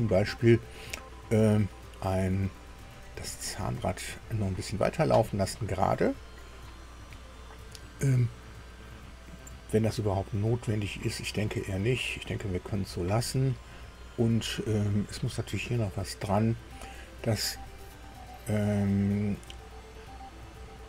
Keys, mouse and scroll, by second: 8.9 scroll down 1, 10.1-11.6 drag, 18.8 middle click, 19.8 middle click.